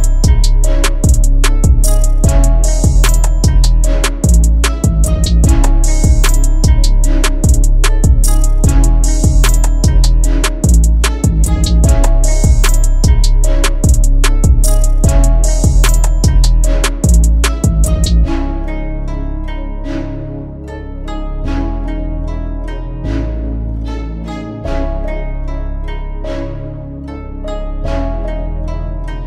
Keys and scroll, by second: 3.3 F4, 5.8 F2, 7.0 c, 15.3 F4, 22.1 shift+Page_Up, 24.6 c, 25.0 F3, 25.4 Escape, 28.2 shift+F2, 28.8 F9.